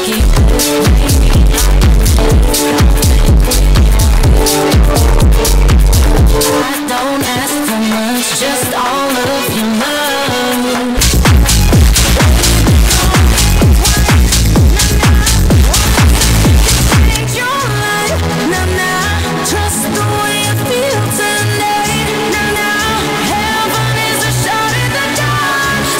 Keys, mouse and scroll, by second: 7.3 Page_Down, 18.0 Page_Down.